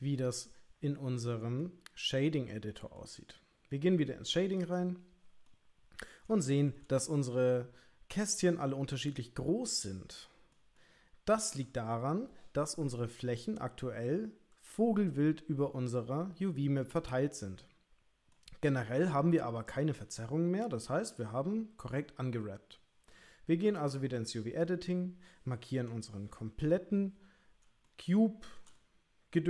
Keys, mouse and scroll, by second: 1.7 middle click, 2.7 shift+middle click, 24.2 click, 25.8 a, 27.9 shift+middle click, 28.8-29.4 middle drag.